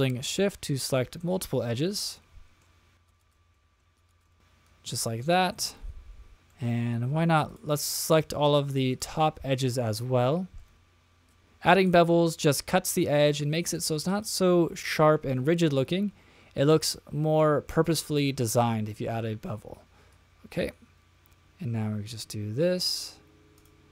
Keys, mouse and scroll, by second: 0.2 middle click, 0.7-1.2 scroll down 2, 1.2-1.8 middle drag, 2.1 shift+middle click, 3.0 shift+click, 3.2 shift+click, 3.5 middle drag, 3.9 shift+click, 4.1 shift+click, 4.2 shift+click, 4.3-5.2 middle drag, 5.7-6.3 shift+middle drag, 6.3 scroll down 1, 6.5 middle click, 7.5 shift+click, 8.1 shift+click, 8.9 shift+click, 9.5-10.7 middle drag, 11.3 shift+click, 11.8 shift+click, 12.2-13.2 middle drag, 14.1 shift+click, 14.8-15.3 shift+middle drag, 15.6-17.5 middle drag, 17.7 shift+middle drag, 18.2-19.2 middle drag, 20.1 click, 23.5 click.